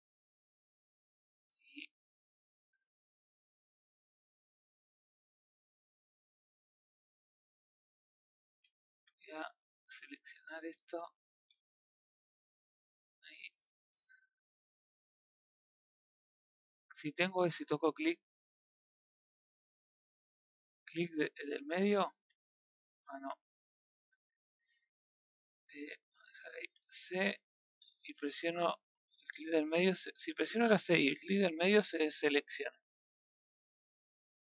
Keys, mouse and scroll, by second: 0.4 scroll down 1, 0.5-2.7 middle drag, 2.7-3.0 scroll up 2, 3.0-4.9 middle drag, 5.2 middle click, 5.9 scroll down 2, 6.1 middle click, 6.7-7.1 scroll up 2, 7.1-8.4 middle drag, 8.4 a, 10.2 click, 11.5 z, 12.6 click, 17.9-22.7 middle drag, 22.7 c.